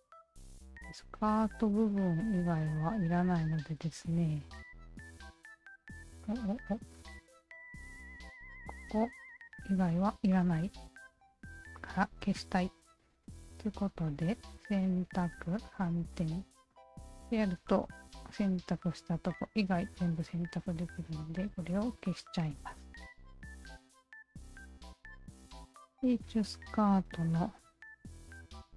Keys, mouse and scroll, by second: 2.5 alt+click, 3.5 click, 4.0 alt+click, 5.3 shift+click, 5.5 shift+click, 6.2 shift+click, 7.2 shift+click, 7.3 shift+click, 7.8-11.7 alt+shift+drag, 13.4 shift+click, 15.7 shift+click, 17.2-19.9 alt+drag, 20.9 z, 21.6-23.1 alt+drag, 24.8-25.8 alt+drag, 26.5 alt+click, 28.0 1, 28.5 alt+click.